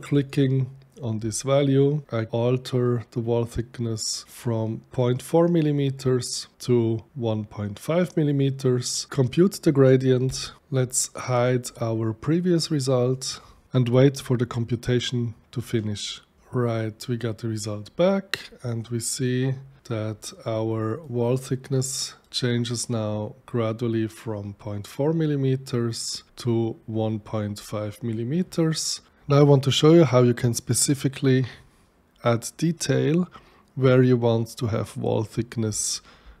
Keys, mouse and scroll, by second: 0.1 click, 2.0 KP_5, 2.8-3.9 drag, 4.2 click, 10.3 click, 13.1 click, 17.8-20.8 middle drag, 20.8 click, 21.8 right click, 24.5 middle click, 25.2 right click, 28.1 right click, 29.1-36.4 middle drag.